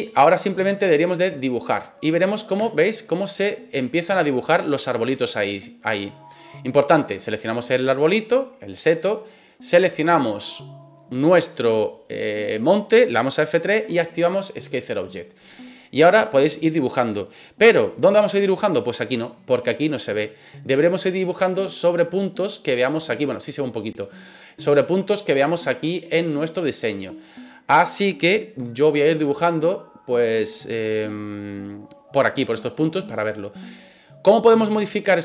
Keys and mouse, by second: 0.3 middle click, 2.6 shift+middle click, 3.8 middle click, 9.1-9.5 middle drag, 15.9 middle drag, 26.4-27.2 middle drag, 28.3-29.1 shift+middle drag.